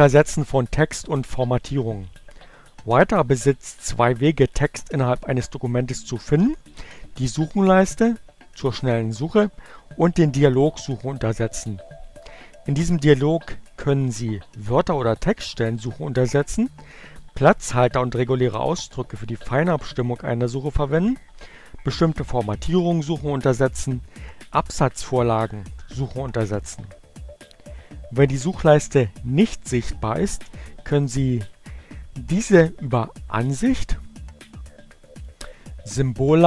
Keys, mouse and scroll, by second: 34.9 click.